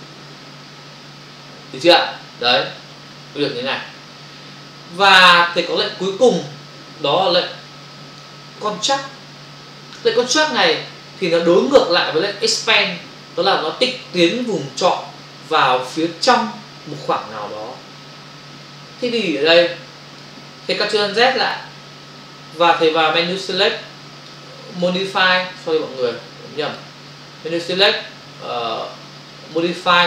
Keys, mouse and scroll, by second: 5.7 click, 6.3 click, 7.5 click, 20.2 click, 21.7 ctrl+alt+z, 23.4 click, 24.7 click, 26.7 click, 29.5 click.